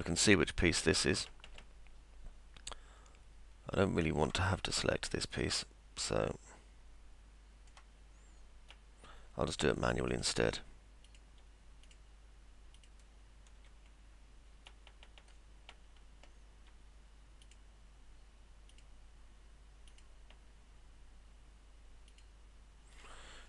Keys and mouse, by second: 0.0 alt+middle click, 1.3-4.2 alt+middle drag, 4.6-7.8 middle drag, 8.8-10.7 middle drag, 11.9 ctrl+click, 12.8 ctrl+click, 17.5 ctrl+click, 18.7 ctrl+click, 19.9 ctrl+click, 22.1 ctrl+click.